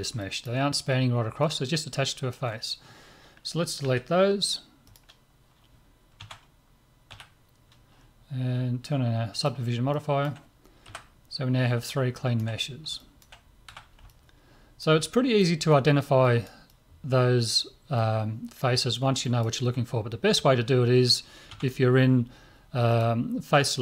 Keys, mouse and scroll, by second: 0.2-3.2 middle drag, 3.8 Delete, 6.2 Tab, 7.1 z, 7.7-9.4 middle drag, 9.4-11.7 drag, 9.9 middle click, 10.9 KP_Divide, 12.6-21.1 middle drag, 13.7 a, 21.5 Tab, 22.9-23.8 drag.